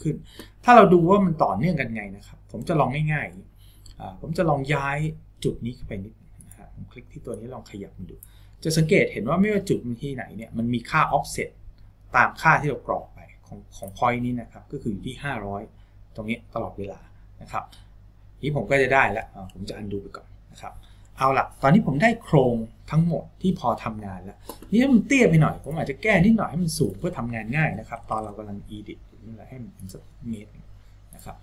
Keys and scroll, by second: 20.3 ctrl+z, 28.0 KP_0.